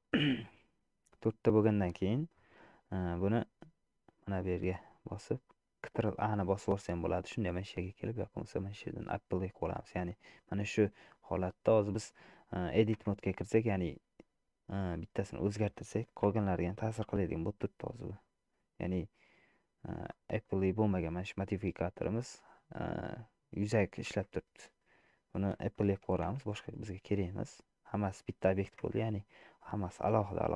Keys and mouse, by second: 4.2-6.9 drag, 8.6-10.7 drag, 12.5 middle click, 13.3 Tab, 14.9 click, 16.6 g, 24.2 Tab, 26.4 ctrl+a, 27.4 middle click, 28.3 shift+click, 29.1 Tab, 29.5 click.